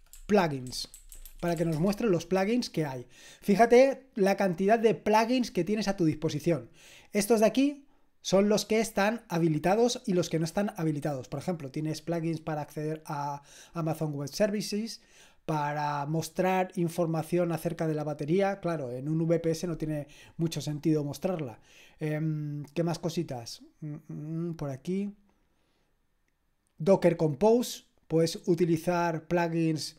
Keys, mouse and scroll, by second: 0.0-2.1 typing, 27.4-29.9 drag.